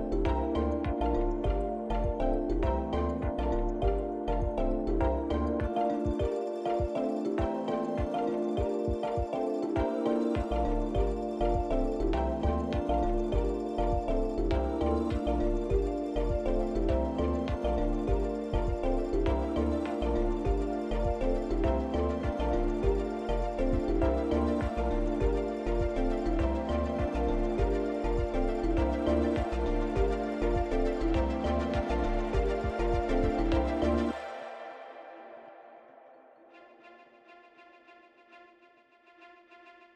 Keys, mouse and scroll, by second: 1.3 click, 3.3 click, 5.0 click, 5.1 click, 11.5 click, 17.4 Tab, 18.7 click, 19.7 shift+click, 20.6 click, 21.7 click, 22.4 click, 23.0 shift+click, 24.5 click, 25.4 click, 27.9 click, 29.0 Tab, 31.5 click, 34.7 click, 34.9 click, 38.8 o.